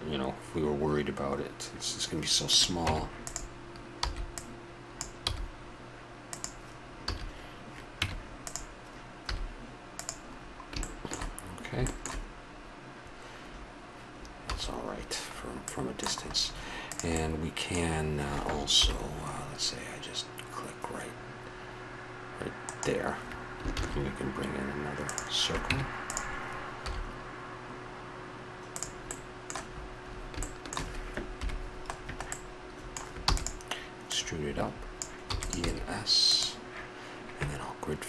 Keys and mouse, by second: 2.5-4.2 drag, 2.8 Tab, 4.0 b, 5.2 g, 7.0 a, 8.0 Tab, 9.2 z, 10.3 middle drag, 13.6 middle click, 14.5 a, 16.9-18.8 right drag, 18.8 KP_7, 22.6-24.5 right drag, 23.7 shift+a, 25.7 Tab, 26.8 s, 31.4 KP_Decimal, 33.3 e, 35.3 e, 35.6 s.